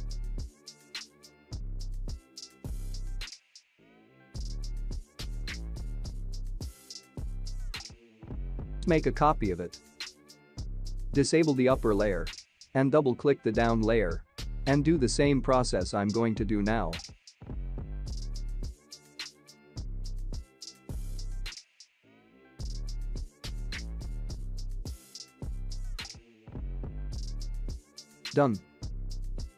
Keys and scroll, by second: 2.7 ctrl+t, 9.5 ctrl+j.